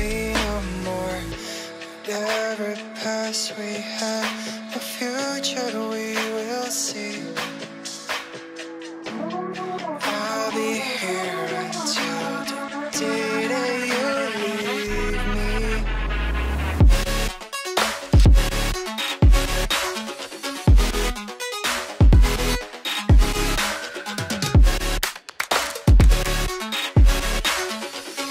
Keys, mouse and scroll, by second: 1.8 double click, 2.2 ctrl+z, 4.3 right click, 8.5 double click, 11.2 F2, 16.5 space, 19.9 shift+click, 21.0 right click, 22.9 Left, 24.4 right click.